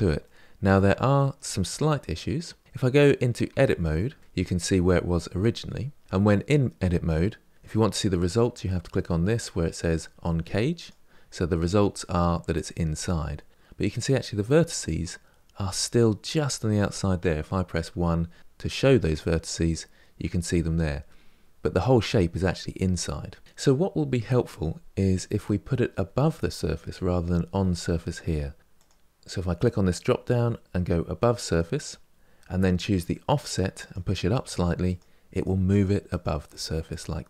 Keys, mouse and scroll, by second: 0.0-1.5 middle drag, 1.5-3.2 scroll up 2, 3.2 Tab, 4.1-6.0 shift+middle drag, 10.5 click, 11.3-13.5 middle drag, 13.5-14.1 scroll up 1, 17.6 1, 28.3 click, 33.5-37.2 drag.